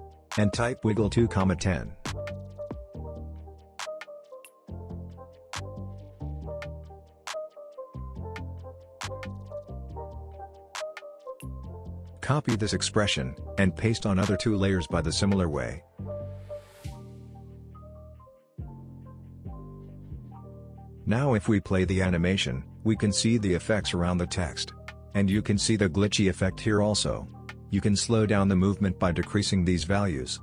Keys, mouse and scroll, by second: 0.9 Return, 2.7 ,, 4.9-8.1 drag, 12.8 ctrl+c, 13.3 click, 14.5 alt+click, 15.8 ctrl+v, 17.3 alt+click, 18.2 ctrl+v, 18.8 click, 20.5 space, 20.9 click, 21.0 space, 23.4 space, 23.8-24.4 scroll down 1, 24.4 space, 27.7-28.8 scroll up 1, 28.8-30.4 drag.